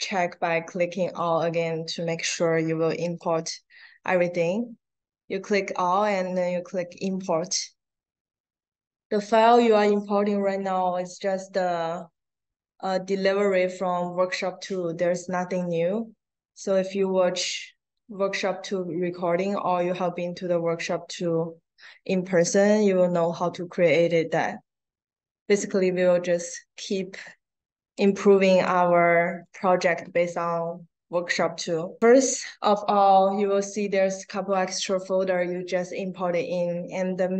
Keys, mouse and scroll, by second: 0.9 click, 3.0 click, 27.9 click.